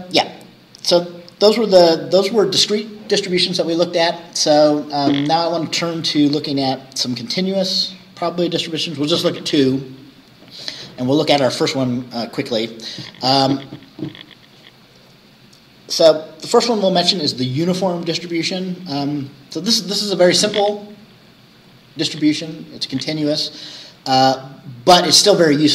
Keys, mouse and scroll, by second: 0.2 scroll down 2, 7.4 click.